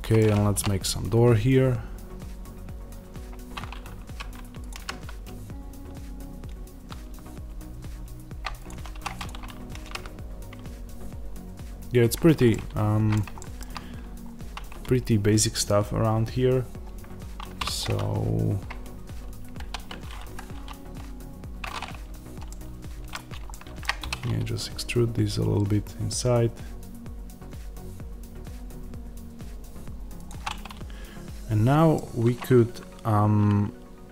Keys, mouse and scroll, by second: 4.6 click, 4.7 g, 8.5 click, 8.8 2, 9.0 click, 9.7 g, 12.0 click, 12.4-17.6 middle drag, 14.1-17.5 scroll up 1, 17.5 3, 17.6-19.5 drag, 19.5 ctrl+r, 22.3-30.2 middle drag, 23.9 e, 30.2 click, 30.4-34.1 middle drag.